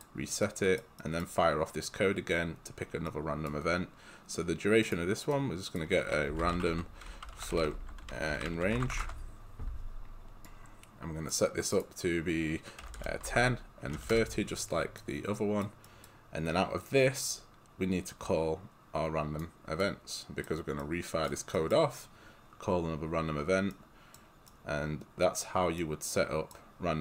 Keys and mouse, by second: 0.4 right click, 6.1-9.5 typing, 10.5 click, 12.6-14.5 typing, 15.0 right click, 18.1 click, 20.9 right click.